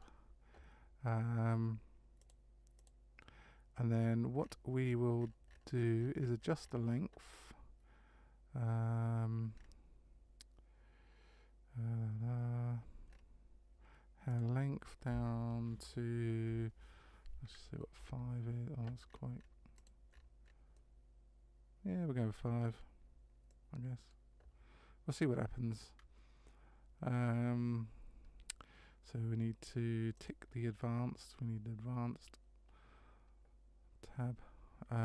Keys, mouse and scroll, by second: 2.2 click, 4.4-5.3 scroll up 10, 5.3 scroll down 1, 9.5-10.0 scroll down 3, 13.1 scroll up 3, 14.3 click, 20.1-21.4 scroll up 6, 20.7 middle click, 22.8 scroll down 1, 23.5 middle click, 30.2 click.